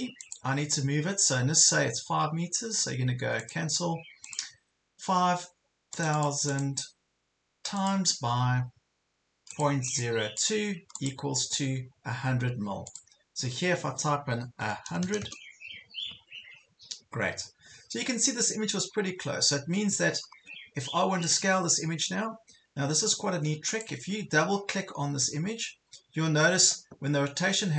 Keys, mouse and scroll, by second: 14.6 KP_1, 14.9 KP_0, 17.5 ctrl+scroll down 1, 18.2 ctrl+scroll up 1, 18.9 ctrl+scroll down 1, 19.2 ctrl+scroll up 1, 19.9 ctrl+scroll up 1, 20.9 scroll down 1, 21.2 click, 21.8 ctrl+scroll down 1, 22.8 ctrl+scroll up 1, 23.7 click, 25.4 ctrl+scroll down 1.